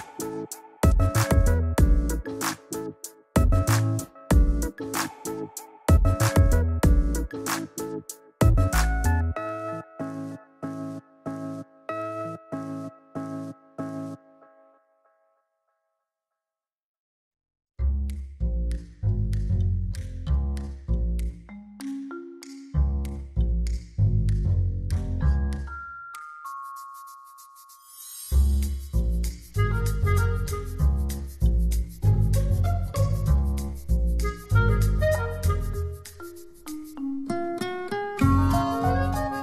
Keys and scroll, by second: 4.8 z, 7.2 space, 10.9 z, 13.3 p, 28.0 v, 34.0 super+t, 34.7 alt+super+t.